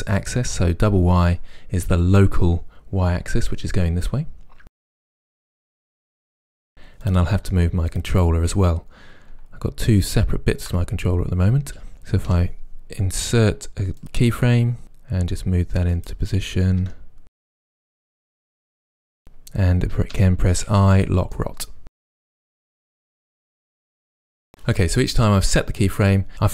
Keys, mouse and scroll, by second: 4.6 click, 4.8-7.1 middle drag, 5.1 r, 5.5 click, 7.1 click, 7.9 click, 10.0 shift+click, 12.3 i, 15.2 g, 16.1 click, 16.8 r, 17.4 click, 17.5 middle click, 18.0 r, 18.2 click, 18.6 g, 18.9 click, 20.1 i, 21.4-22.7 middle drag, 22.7 g, 23.8 click, 24.2 i, 24.8-26.5 middle drag.